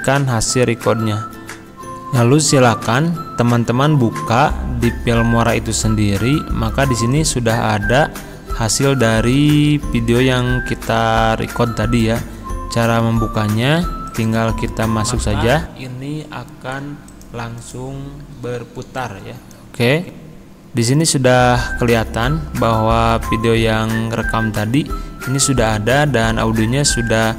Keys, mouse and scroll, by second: 7.2 click, 14.1 click, 17.2 click.